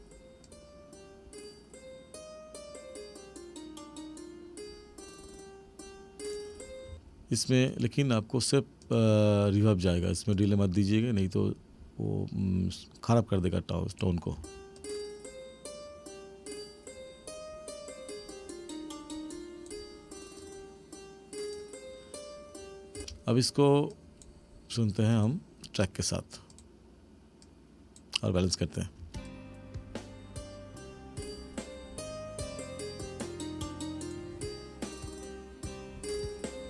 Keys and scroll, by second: 6.9 space, 14.4 space, 23.0 space, 29.0 space.